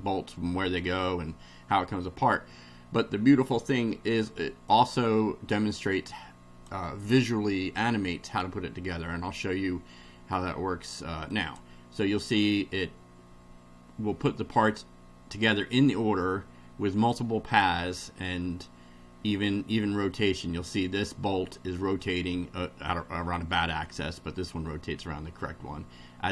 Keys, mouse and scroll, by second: 4.7-6.9 drag, 11.3 click, 15.7-18.5 middle drag, 19.6 middle click, 23.8-26.3 middle drag.